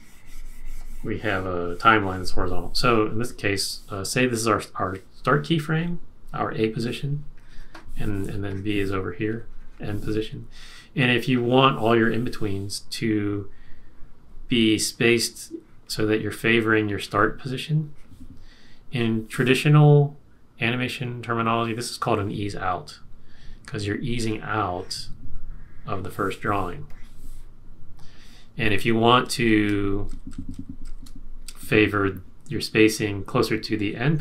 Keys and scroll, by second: 28.9 super+z, 29.5 super+z, 30.1 super+z, 30.8 super+z.